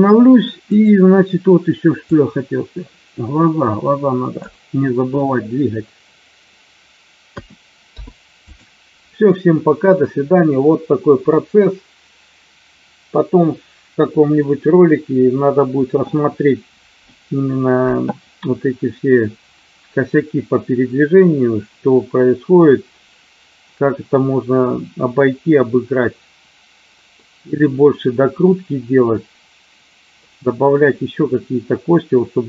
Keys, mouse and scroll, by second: 2.0-4.4 drag, 7.3 a, 7.9 i, 27.0-30.0 middle drag.